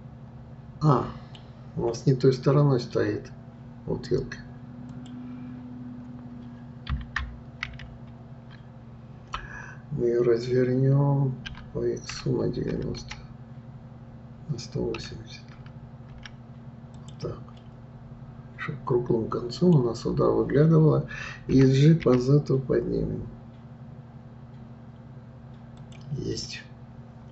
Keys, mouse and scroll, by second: 4.9 click, 7.8 ctrl+z, 17.6-20.6 middle drag, 26.4-27.3 middle drag.